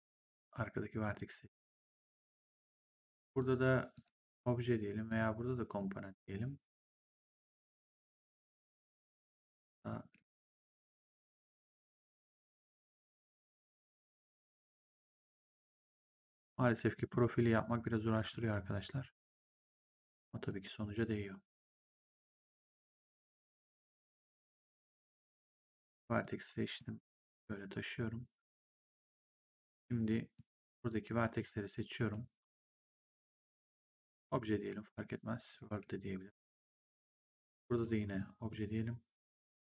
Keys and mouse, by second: 0.3 click, 3.3 click, 5.0 click, 6.9 click, 10.0 w, 10.5 click, 13.8 click, 16.8 click, 23.1 click, 26.1 click, 27.3 click, 30.3 click, 31.9 r, 33.5 click, 35.6 w, 37.6 click, 37.6 g, 38.0 click, 39.2 click.